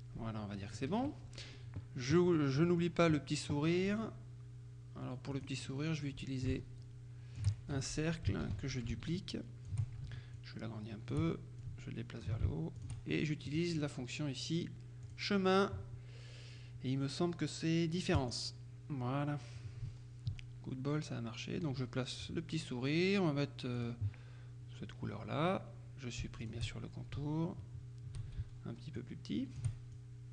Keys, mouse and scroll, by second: 0.8 KP_Subtract, 2.3-3.4 drag, 5.5 click, 5.9 right click, 7.8 ctrl+shift+F1, 8.5 d, 9.0-10.2 ctrl+shift+drag, 10.4-11.7 drag, 12.8 shift+click, 15.1 click, 18.2 click, 19.6-22.2 ctrl+drag, 23.8 click, 26.5 shift+click, 29.0-30.2 ctrl+drag.